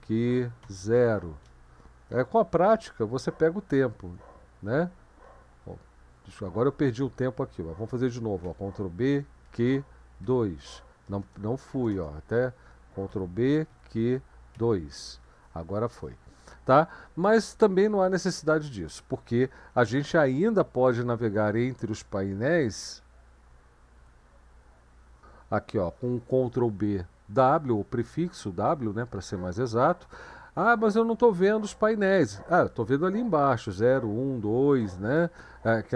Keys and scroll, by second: 0.0-0.6 typing, 2.7 ctrl+b, 8.4 ctrl+b, 9.4 q, 10.2 2, 11.7-12.4 typing, 13.1 ctrl+b, 13.4-15.0 typing, 23.3 ctrl+b, 24.0 w.